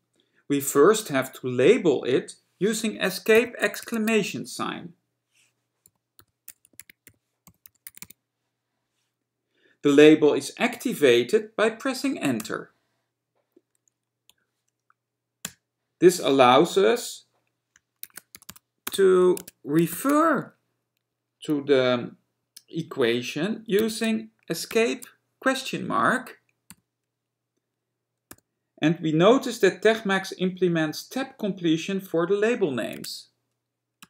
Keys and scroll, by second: 3.4 Escape, 6.8-8.7 typing, 12.5 Return, 19.4 Tab, 20.1 (, 23.9 Escape, 33.1 Tab.